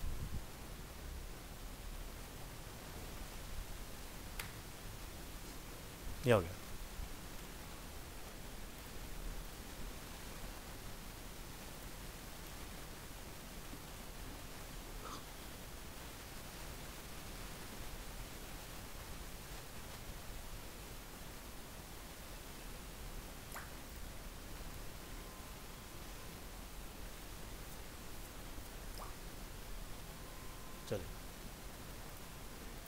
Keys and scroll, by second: 2.6 ctrl+s, 2.9 alt+Tab, 4.6 ctrl+s, 4.9 alt+Tab, 10.0 alt+Tab, 30.1 ctrl+s.